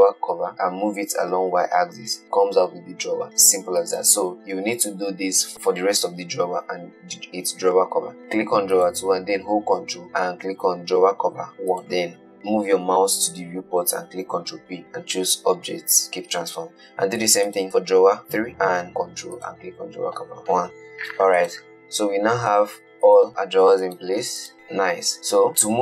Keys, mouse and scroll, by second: 1.1 g, 9.1 click, 12.0 ctrl+p, 14.5 ctrl+p, 17.6 click, 19.6 ctrl+click, 20.4 ctrl+p, 21.7 click, 22.6 g, 23.4 click, 23.7 g, 24.1 click, 24.4 g, 24.9 middle click, 25.1-25.5 scroll down 1, 25.5 click.